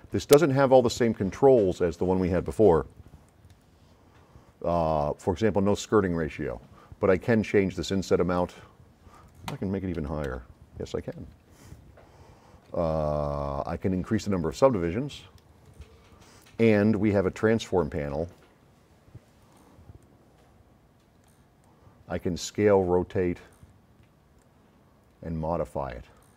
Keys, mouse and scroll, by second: 0.0 middle click, 0.4 middle click, 0.7 s, 0.9-2.3 right drag, 3.3 click, 10.0 KP_2, 10.3 KP_Enter, 14.3-15.8 drag, 17.0 click, 20.0 click, 21.1 click, 21.7 click, 23.5 drag, 24.4 click.